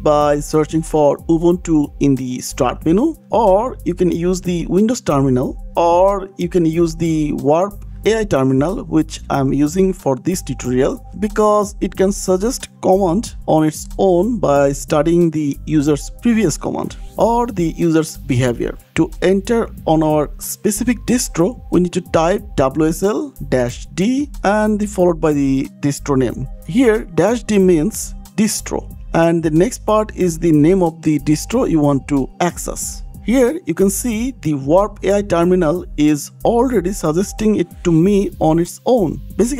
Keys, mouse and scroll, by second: 0.8 click, 1.7-2.2 scroll, 4.1-5.5 typing, 7.5 BackSpace, 11.6 click, 18.1 click, 23.4-25.6 typing, 26.8 d, 29.2 space, 31.2 right click.